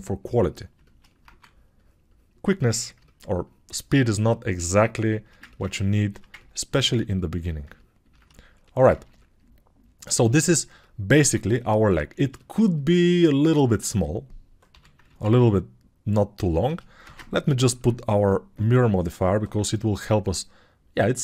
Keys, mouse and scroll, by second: 3.0 alt+2, 10.8-15.0 drag, 10.8-15.0 middle drag, 10.8-15.0 right drag, 13.6 alt+q, 14.7 g, 15.1 alt+q.